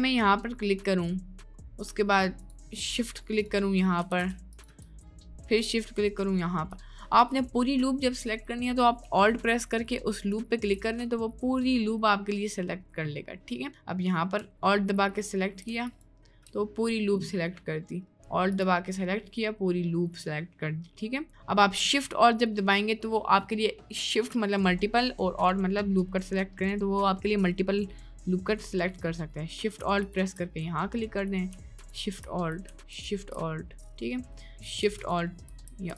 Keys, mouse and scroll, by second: 1.2 right click, 3.4 shift+click, 4.3 ctrl+z, 4.5 click, 5.1 middle click, 7.3 middle click, 8.0 middle click, 11.0-12.8 drag, 13.5 middle click, 16.7-18.0 drag, 18.5 alt+click, 19.1 middle click, 20.3 middle click, 21.1 middle click, 21.7 middle click, 22.4 middle click, 23.7 middle click, 25.7 middle click, 26.4 middle click, 27.1 middle click, 27.6 middle click, 28.0 middle click, 29.0 middle click, 30.0 alt+shift+click, 30.9 middle click, 34.0 middle click.